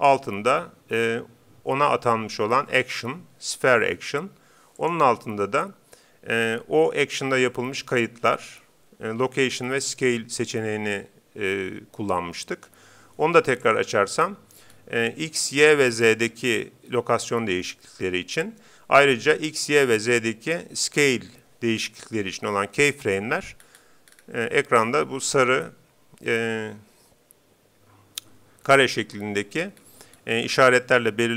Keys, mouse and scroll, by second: 4.8-6.5 drag, 13.6-15.4 drag, 14.7-16.2 scroll down 1, 16.2 scroll down 1, 23.6-24.9 scroll up 1, 24.1-26.3 middle drag, 24.9-25.4 scroll up 1, 29.8-31.3 middle drag.